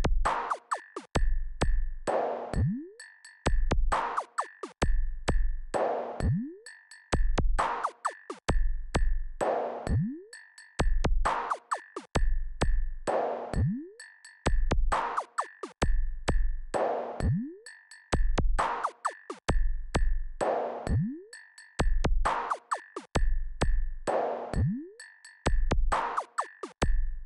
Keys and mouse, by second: 7.8 click, 15.1 KP_6, 15.4 KP_6, 17.8 click, 19.4 click, 20.8 click, 22.7-27.2 drag.